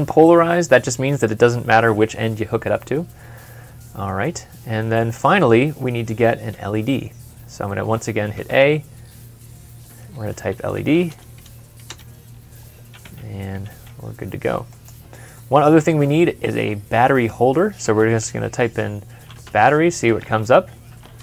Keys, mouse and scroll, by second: 4.8 middle click, 8.2 middle click, 8.3 a, 10.2-11.2 typing, 11.7 Return, 13.3 typing, 15.2 middle click, 17.7 typing, 19.0-20.6 typing.